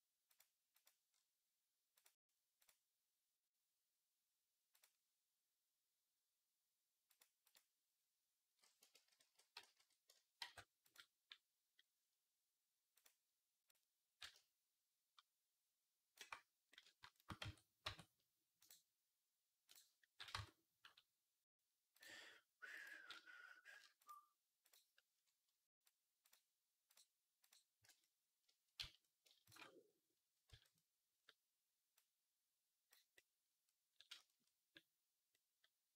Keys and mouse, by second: 0.2 right click, 0.7-1.8 right drag, 8.8 ctrl+z, 9.1 ctrl+z, 9.7 ctrl+z, 10.4 ctrl+z, 10.8 right click, 11.7-20.2 right drag, 12.8-20.2 drag, 12.8-20.2 middle drag, 17.2 Tab, 17.7 Tab, 20.2 Tab, 22.7-26.1 drag, 27.7 shift+click, 27.8 right click, 28.3-33.0 shift+drag, 28.6 z, 30.3 z, 35.2 click, 35.2 middle click, 35.2 right click, 35.5 click, 35.5 middle click, 35.5 right click.